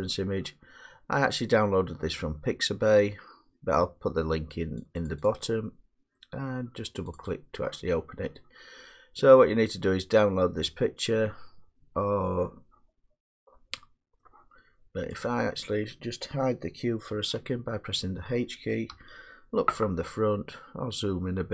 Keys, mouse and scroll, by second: 4.9 click, 5.2 click, 5.4 click, 7.1 click, 7.3 click, 14.2 middle click, 15.2 click, 17.1 h, 18.9 1, 20.0 middle click, 20.2 middle click, 20.3 middle click.